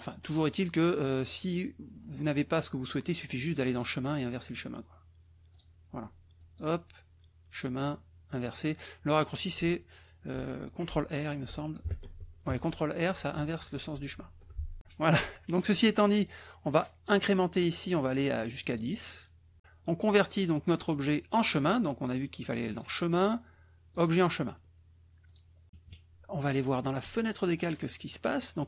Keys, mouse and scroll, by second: 0.0 click, 3.8 click, 5.5 click, 6.4 click, 7.5 click, 11.2 click, 11.9 shift+r, 18.5 click, 22.6 click, 23.9 click, 25.2 click, 25.9 KP_Subtract, 27.3 click.